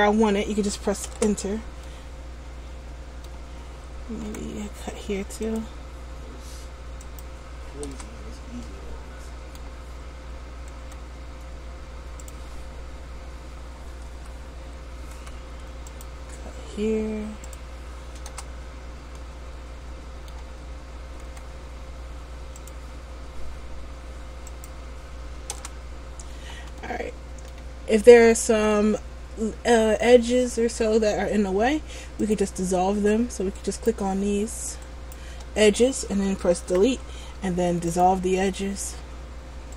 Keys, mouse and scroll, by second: 2.0 middle click, 4.5 k, 8.8 middle click, 11.0 k, 15.3 k, 19.3 middle click, 21.5 k, 26.9 middle click, 32.4 click, 33.7 right click, 35.0 shift+right click, 36.7 Delete.